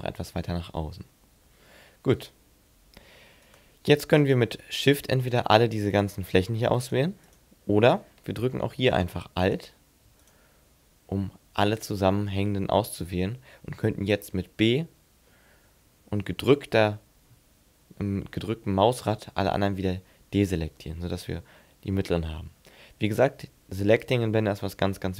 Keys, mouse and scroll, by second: 0.8-1.1 scroll up 4, 2.0-3.5 scroll up 4, 3.5 right click, 4.2 shift+right click, 5.2 shift+right click, 5.9 shift+right click, 6.8 shift+right click, 7.3 shift+right click, 9.2 right click, 10.2 alt+right click, 12.5 middle click, 14.1 b, 16.5 b, 20.6 middle click, 21.8-22.1 scroll up 1, 22.2 scroll down 3.